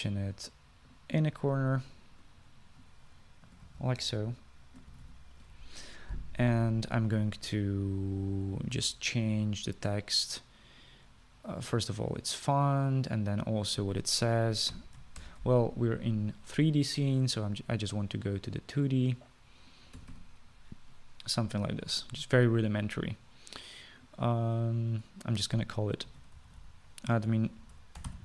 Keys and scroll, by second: 4.4-6.7 typing, 15.6-16.4 typing, 21.1 typing, 27.0-28.2 typing.